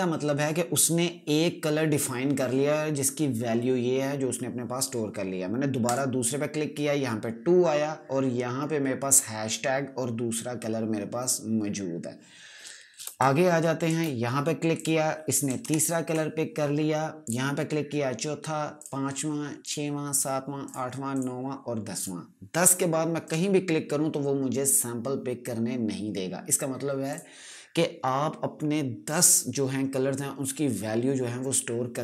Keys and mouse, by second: 5.7 click, 12.9 space, 13.1 click, 13.6 space, 14.6 click, 15.5 ctrl+KP_Subtract, 17.1 click, 27.0 click.